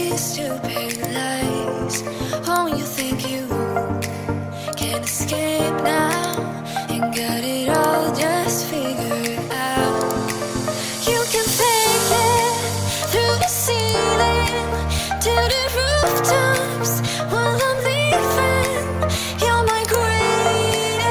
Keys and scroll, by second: 8.0 3.